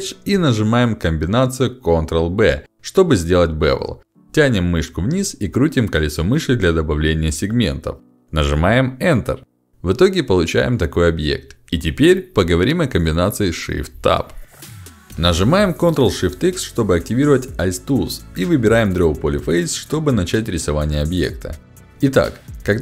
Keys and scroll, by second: 2.2 ctrl+b, 9.2 Return, 17.0 ctrl+shift+x.